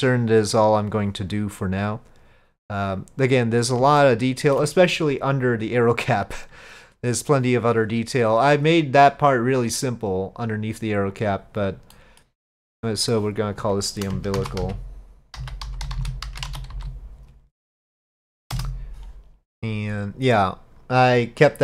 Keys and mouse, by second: 4.0-4.6 shift+middle drag, 11.2 click, 12.0 middle click, 13.2-19.2 drag.